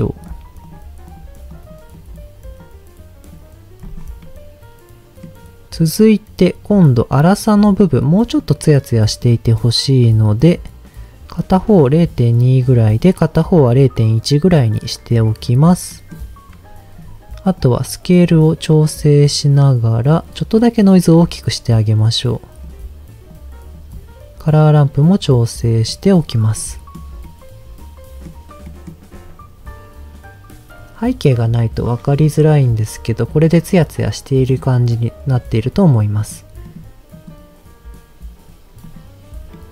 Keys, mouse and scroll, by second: 0.2 click, 0.6 click, 1.1 click, 3.8 click, 4.2-5.4 middle drag, 7.8 click, 8.3 click, 12.0 click, 12.4 click, 12.9 click, 15.9 middle click, 17.6-22.6 drag, 23.3 click, 23.9 click, 25.2 click, 25.9 click, 26.6 middle click, 27.2-28.3 middle drag, 28.7 middle click, 29.0-29.7 scroll up 2, 30.7 scroll down 1, 31.9-32.7 scroll down 2, 32.7 click, 33.3 click, 34.5 click, 35.3 click, 36.1 click, 36.6 click, 37.1 click, 38.9 click, 39.5 middle click.